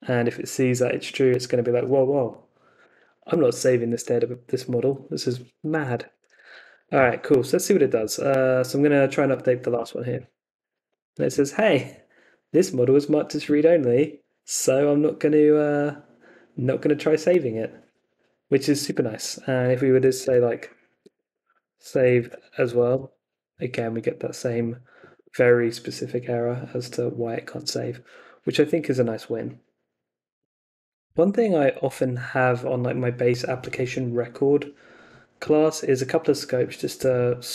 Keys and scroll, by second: 3.9 super+Tab, 5.5-7.2 typing, 7.7 Up, 9.7 Return, 19.9 Up, 20.2 BackSpace, 21.2-22.6 typing, 22.9 Return.